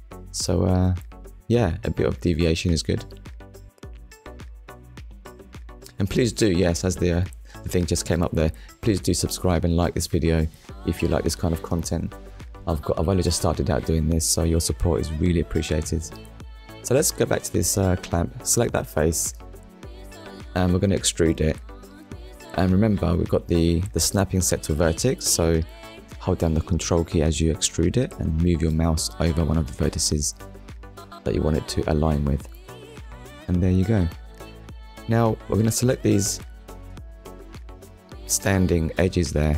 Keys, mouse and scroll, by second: 0.9 click, 1.3 middle click, 2.8 ctrl+middle click, 3.9 shift+middle click, 5.9 click, 13.7 middle click, 22.6 ctrl+click, 24.1 click, 25.0 middle click, 27.3 KP_1, 29.4 middle click, 31.4 click, 32.0 middle click, 32.7 scroll up 1, 34.0 click, 35.0 shift+click, 35.4 middle click, 36.1 shift+middle click, 39.1 click.